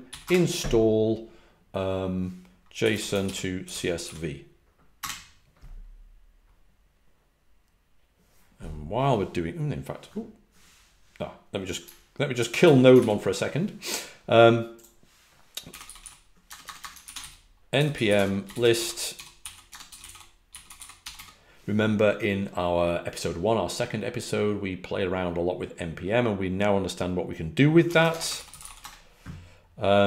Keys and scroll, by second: 0.0-0.2 typing, 2.6-5.4 typing, 15.7-21.6 typing, 27.8-29.1 typing.